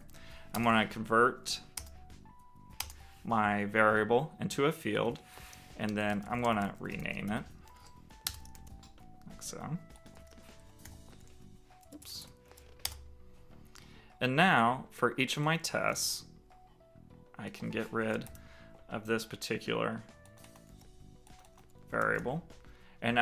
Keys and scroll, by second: 0.2 alt+Return, 5.0 super+r, 8.2 super+s, 9.8 super+r, 15.3 super+c, 17.7 shift+super+Left, 20.3 super+v, 21.3 super+v, 21.7 super+s.